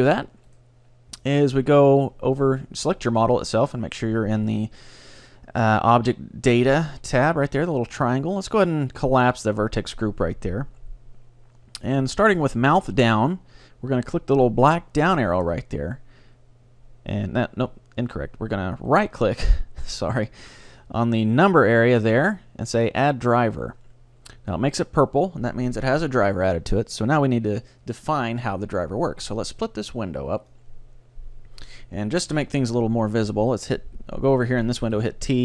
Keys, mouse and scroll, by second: 0.6-2.5 right drag, 9.4-11.4 drag, 12.4-14.3 drag, 15.5-17.5 drag, 18.9-20.8 right drag, 22.0-23.9 right drag, 28.4-30.2 drag, 30.4 click, 35.0 t.